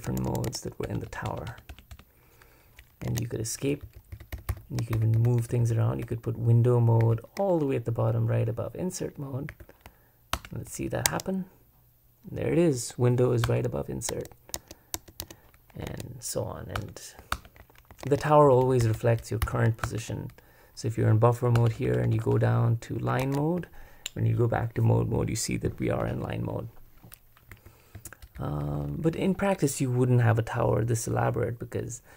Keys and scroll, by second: 1.3 Return, 1.5 Return, 3.1 super+Escape, 3.6-5.7 typing, 7.0 shift+j, 9.5 j, 10.3 super+Return, 11.1 Escape, 13.5 Return, 14.1 Escape, 14.5 Escape, 14.9 Escape, 15.9 super+Escape, 16.8 Return, 17.4 super+Return, 18.0 super+Escape, 18.6 super+Escape, 19.8 super+Return, 21.6 Return, 21.9 Return, 23.2 super+Escape, 27.5 j, 27.9 k.